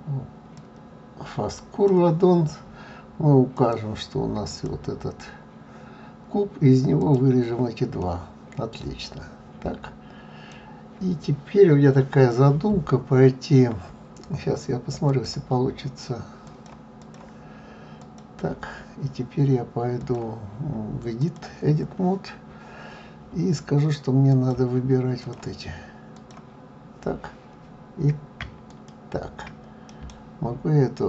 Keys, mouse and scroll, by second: 7.1 click, 8.0-11.0 middle drag, 15.0 click, 17.0 click, 18.0 click, 21.3 click, 28.4 click, 29.9 right click.